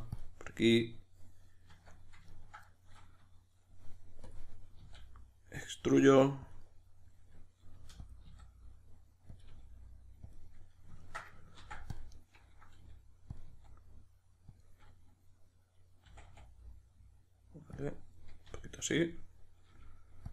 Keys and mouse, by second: 1.7 Tab, 2.3-4.3 ctrl+middle drag, 4.3 click, 4.8 e, 6.6 click, 6.6-9.4 middle drag, 7.8 g, 8.1 click, 8.3 s, 9.4 click, 9.5 g, 10.3 click, 10.4-11.5 middle drag, 11.5 ctrl+r, 12.2 right click, 12.7 g, 13.3 click, 13.5 s, 14.6 click, 16.0 r, 17.8 click, 18.5 r, 19.2 click, 19.7 g.